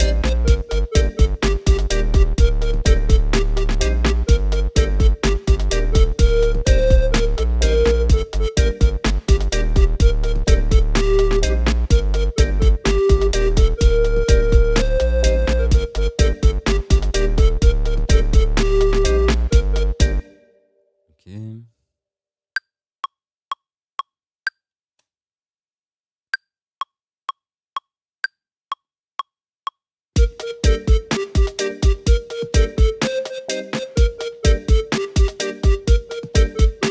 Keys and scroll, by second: 20.2 space, 24.9 space.